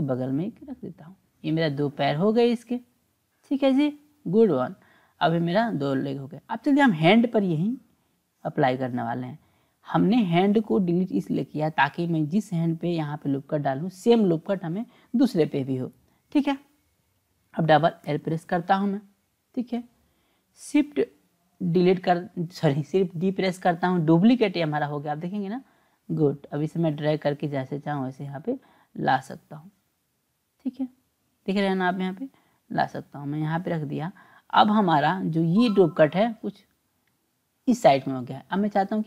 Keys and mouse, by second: 5.2 click, 8.1-11.5 drag, 12.9 click, 18.0 l, 18.2 l, 21.6 shift+d, 24.7-33.6 drag.